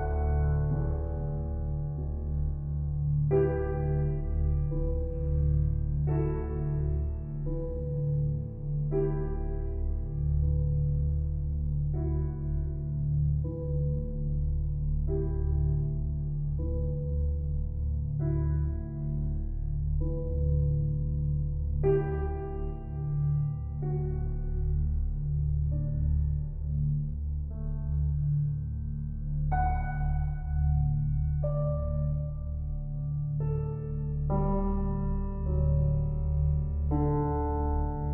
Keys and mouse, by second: 3.0 click, 3.9-5.4 ctrl+alt+drag, 7.1 click, 8.9 Tab, 10.7 alt+a, 11.1 b, 12.4 Escape, 12.8 typing, 13.0 alt+shift+click, 13.6-15.0 alt+drag, 15.0 b, 15.4-23.0 drag, 23.0 Tab, 24.8-30.9 ctrl+alt+drag, 30.9 g, 31.3 z, 34.4 Escape, 35.3 g, 35.7 x, 36.9 Escape.